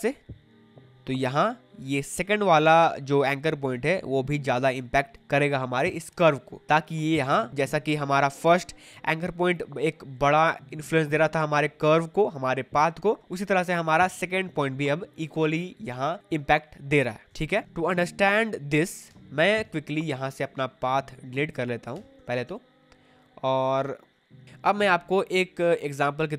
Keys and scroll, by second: 2.2 space, 17.4 Escape, 18.0 v, 19.1 Delete, 21.9 Delete.